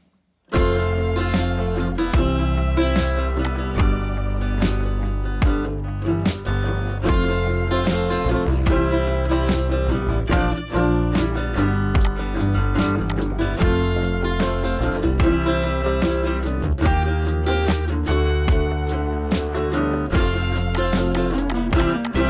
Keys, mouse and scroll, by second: 0.9 ], 1.1 ], 3.4-10.6 drag, 10.8 scroll down 1, 11.8 space, 12.0-12.6 click, 12.3 space, 12.6 scroll up 1, 12.8 space, 13.0 click, 13.3-13.7 space, 13.9 scroll up 1, 14.7 scroll up 1, 15.4 ], 15.6 ], 17.6-20.5 drag.